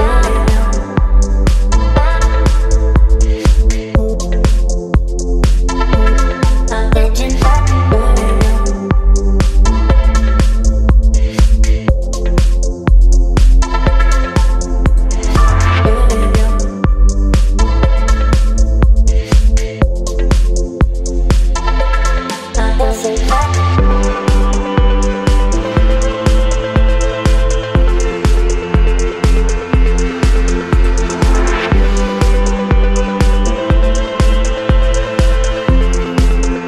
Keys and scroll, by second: 0.1 space, 7.1 Return, 8.9 space, 11.6 space, 18.1 space, 21.0 space, 27.3 ctrl+d, 30.0 ctrl+t, 30.9 space, 32.8 Return, 34.3 space, 36.2 space.